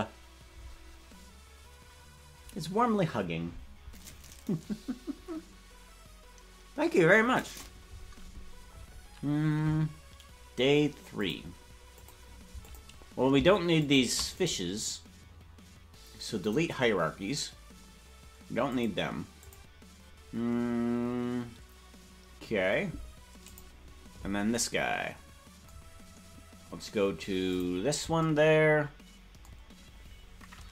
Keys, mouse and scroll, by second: 11.1 click, 11.9 click, 12.5 click, 13.7 shift+click, 14.3-17.5 right drag, 18.6 click, 19.3 click, 20.2-22.6 scroll down 3, 22.6 scroll down 1, 23.4 click, 27.4 click.